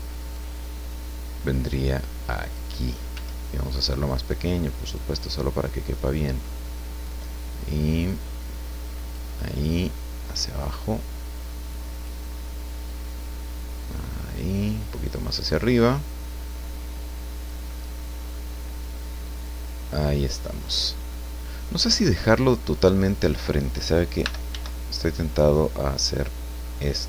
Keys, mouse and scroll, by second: 0.3-2.7 drag, 3.1 s, 4.8 click, 5.1-6.6 middle drag, 7.0-9.3 drag, 9.7-12.2 drag, 12.9-14.6 drag, 15.1-17.7 drag, 17.7 middle click, 19.4-20.8 drag, 21.1-22.1 middle drag, 24.2 r, 24.5 z, 26.8 click.